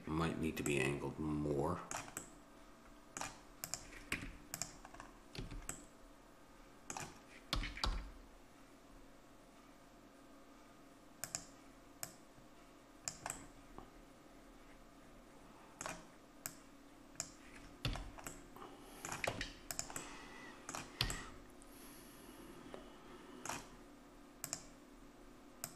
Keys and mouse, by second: 0.8-2.3 middle drag, 3.7-5.8 drag, 4.1 Tab, 5.4 a, 7.5 r, 12.0-13.9 drag, 13.4-15.3 middle drag, 13.4 right click, 16.6-18.3 drag, 17.9 a, 19.3 Tab, 21.1 a, 24.5-25.7 drag.